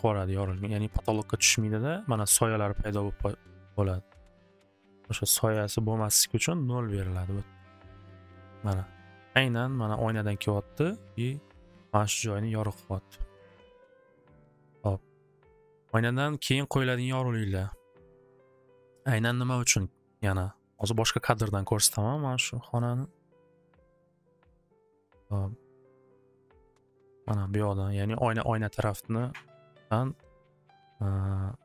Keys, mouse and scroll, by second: 5.1 click, 5.2 click, 5.3 typing, 6.6 0, 14.3 click, 15.3 click, 20.7 c, 26.0 click, 26.2 click.